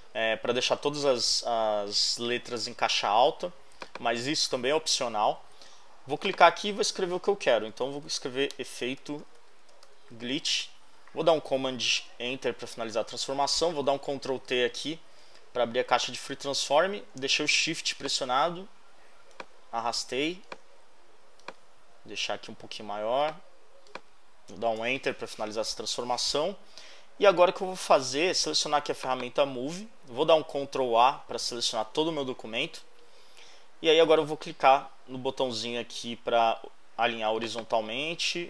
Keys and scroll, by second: 7.5-10.3 typing, 10.7 super+h, 12.0 super+Return, 13.8 super+t, 14.6 shift+super+t, 24.8 shift+Return, 30.6 super+a.